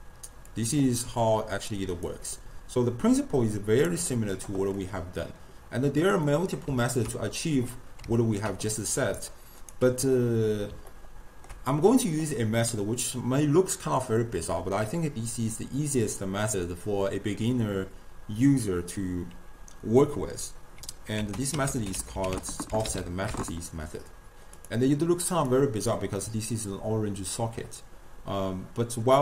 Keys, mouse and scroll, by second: 0.5-1.8 drag, 1.8-2.1 d, 3.2 right click, 3.9 d, 4.8-9.0 middle drag, 9.0 d, 9.2 right click, 9.8 d, 11.0-14.9 ctrl+middle drag, 21.2 ctrl+a, 21.8 f, 25.5-28.7 drag.